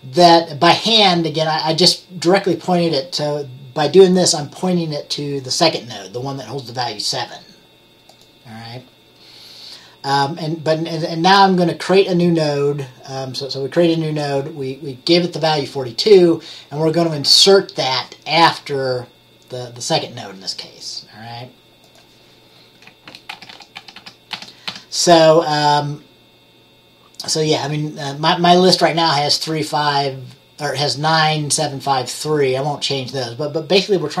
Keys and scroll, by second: 23.5 ctrl+z, 23.6 ctrl+z, 23.9 ctrl+z, 24.1 ctrl+z.